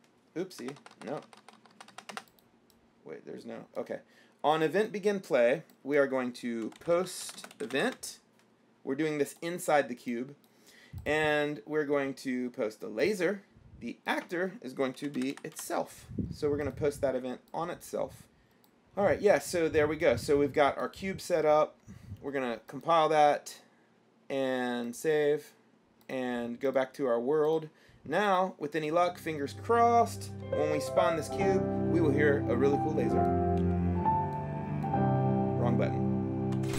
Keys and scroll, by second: 0.0-0.8 typing, 6.6-8.6 typing, 14.9-16.2 typing, 33.9 o.